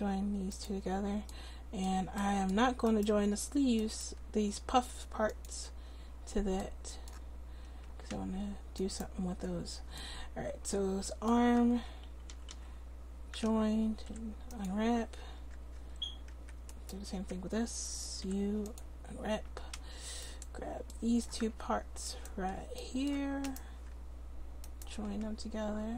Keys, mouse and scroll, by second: 2.9-6.2 right drag, 5.3 click, 8.8-10.0 right drag, 10.2 right click, 11.7 Tab, 12.3 a, 12.5 a, 14.1 u, 16.4 Tab, 17.2 Tab, 18.2 u, 19.5 Tab.